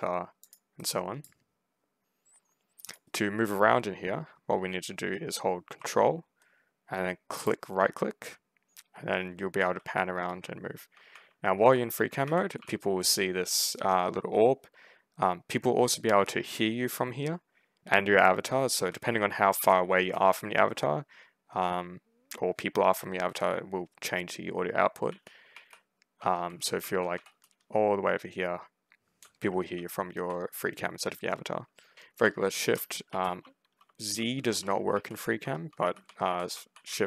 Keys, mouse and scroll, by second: 0.3 click, 0.7 right click, 2.7 click, 3.0 1, 7.3 ctrl+right click, 9.2 ctrl+s, 9.4 a, 10.0 ctrl+space, 10.3 ctrl+w, 11.0 ctrl+w, 11.5 ctrl+s, 11.8 ctrl+w, 12.1 ctrl+w, 12.4 ctrl+s, 18.6 ctrl+a, 18.9 ctrl+s, 19.0 d, 19.4 ctrl+w, 19.9 ctrl+s, 24.9 ctrl+s, 25.4 ctrl+a, 25.8 ctrl+s, 26.0 d, 26.7 w, 27.0 s, 29.6 ctrl+w, 31.9 ctrl+shift+w, 32.4 ctrl+shift+w, 32.9 ctrl+z, 33.3 ctrl+d, 33.7 ctrl+s, 34.2-36.4 typing, 35.6 ctrl+shift+w, 35.9 ctrl+shift+s, 36.7 ctrl+shift+s.